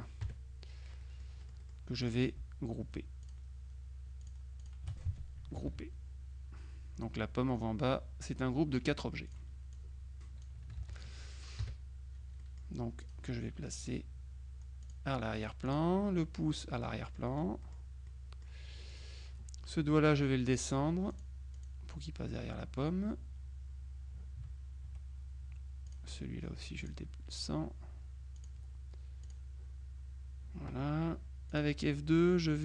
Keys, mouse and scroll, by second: 0.3 KP_Subtract, 1.1-2.6 middle drag, 2.1 click, 3.3 shift+click, 4.3 click, 5.7 ctrl+g, 9.4 click, 10.9 ctrl+z, 11.0 ctrl+click, 11.7 KP_Subtract, 12.5 middle click, 14.9 click, 15.7 click, 16.6 click, 17.1 middle click, 17.4 middle click, 19.0 click, 20.5 click, 21.2 click, 26.0 click, 26.9 click, 28.4 click, 29.3 click, 31.6 click.